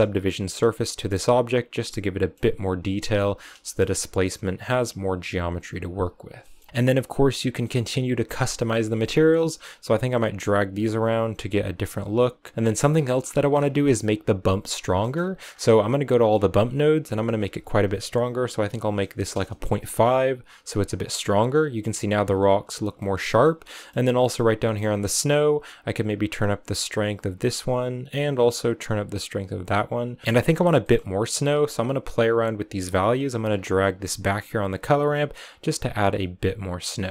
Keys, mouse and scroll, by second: 1.3 click, 1.8 middle click, 2.3-4.8 middle drag, 4.8-6.1 drag, 6.1 scroll down 2, 6.3-7.7 middle drag, 7.7-9.7 scroll up 4, 8.4 middle click, 9.7-12.5 drag, 12.5 middle click, 12.8 scroll down 6, 12.9 middle click, 13.4-14.5 scroll up 5, 14.5-15.4 scroll up 4, 14.9 middle click, 15.4-15.9 scroll down 2, 15.9 click, 16.2-17.1 scroll up 4, 17.1-20.1 drag, 21.3 scroll up 2, 22.1-22.6 scroll down 4, 22.8-24.7 middle drag, 24.7-25.9 scroll up 4, 25.9-30.2 drag, 30.2 middle click, 30.3-30.7 scroll up 6, 30.7 middle click, 31.5-33.3 drag, 33.3-33.8 scroll up 3, 33.8 scroll down 2, 34.0 middle click, 34.6-36.7 drag, 36.7-37.1 middle drag.